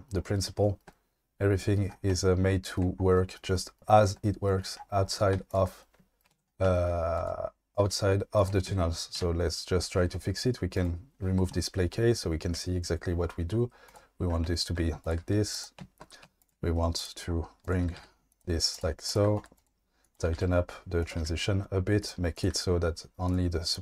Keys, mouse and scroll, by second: 2.2-2.8 shift+middle drag, 5.3 q, 6.3 Tab, 7.2 click, 7.9 f, 7.9 g, 8.4 click, 8.7 ctrl+z, 9.2 ctrl+z, 10.8 click, 12.5 g, 13.8 click, 15.2 g, 16.4 shift+click, 16.9 right click, 17.8 g, 18.0 g, 18.7 click, 19.1 shift+click, 19.5 right click, 20.1 click, 20.2 g, 20.4 g, 21.0 click, 21.1 g, 22.3 click, 22.5 g, 23.3 click.